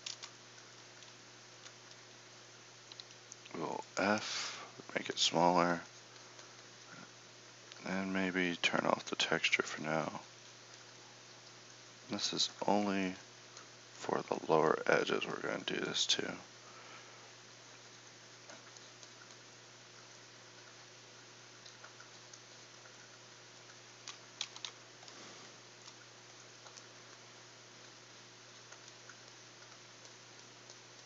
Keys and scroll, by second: 3.1 f, 24.5 KP_1.